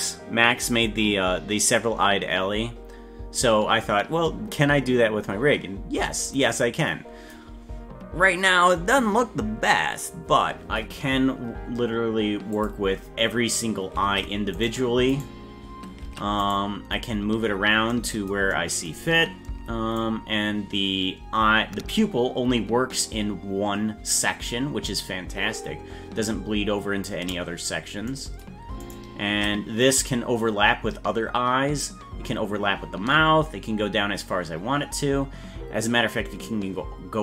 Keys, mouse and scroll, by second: 7.7 scroll up 3, 12.5 click, 14.0 ctrl+Tab, 15.2 right click, 16.0 ctrl+Tab, 16.6 right click, 20.0-27.0 shift+drag, 28.9 right click, 29.8-36.9 shift+drag.